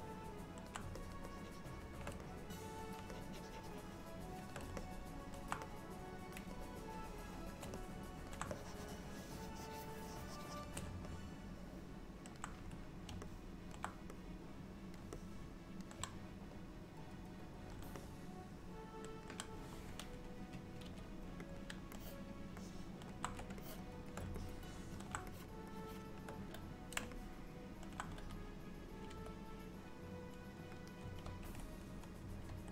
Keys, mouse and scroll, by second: 1.1 shift+click, 1.4 shift+click, 2.3 click, 3.2 shift+click, 4.8 middle click, 5.7 click, 6.6 shift+click, 7.9 middle click, 8.6 shift+click, 11.3 middle click, 13.3 middle click, 14.3 click, 15.2 middle click, 16.9 click, 18.1 middle click, 20.9 f, 22.0 alt+middle click, 23.7 shift+click, 24.5 middle click, 25.4 shift+click, 26.0 shift+click, 27.2 middle click, 29.3 s, 31.4 ctrl+z, 32.6 ctrl+z.